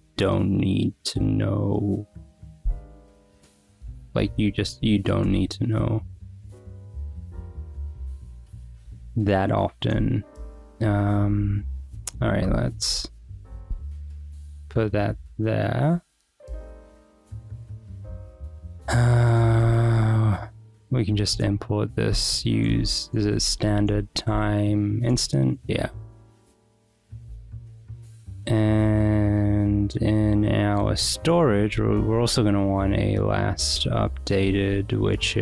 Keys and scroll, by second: 1.0 Return, 2.6 shift+o, 4.1 w, 5.4 alt+Return, 10.0 Escape, 10.8 j, 12.2-14.9 typing, 16.0 w, 16.1 Return, 19.4 g, 20.3 w, 21.3 Return, 21.6-24.5 typing, 25.1 Return, 25.6 Escape, 26.1 Return, 31.7 Return, 31.9-35.4 typing.